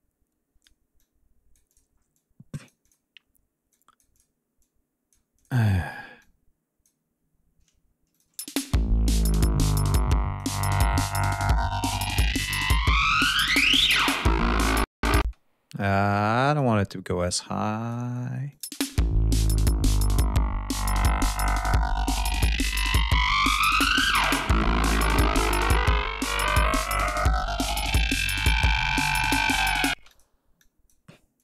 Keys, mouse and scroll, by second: 1.0 click, 2.1 click, 3.7 click, 4.6 click, 5.4 click, 6.2 click, 8.1 click, 8.3 space, 9.3 ctrl+scroll down 2, 9.9 ctrl+click, 14.6 ctrl+scroll up 2, 15.1 ctrl+space, 16.0 click, 17.3 click, 18.4 click, 18.6 space, 24.6 ctrl+scroll down 2, 25.0 ctrl+scroll up 2, 28.3-29.7 drag, 29.9 space, 30.0 click, 30.5 click, 31.3 click.